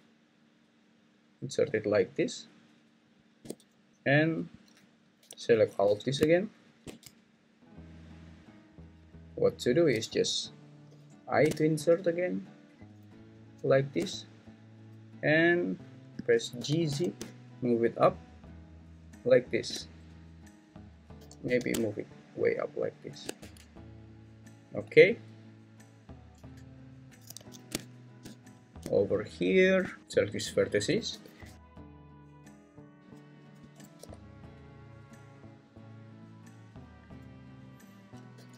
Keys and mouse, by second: 3.2 shift+click, 8.1 ctrl+click, 10.9 i, 15.1 middle click, 16.6 g, 16.9 z, 21.2 g, 21.4 z, 23.4 Tab, 25.1 `, 26.3 Tab, 27.4 alt+z, 30.0 Escape, 30.0 g, 30.0 x, 31.1 g, 31.5 x, 32.7 click, 33.7 click, 34.0 g, 36.2 click, 37.1 click, 38.3 g.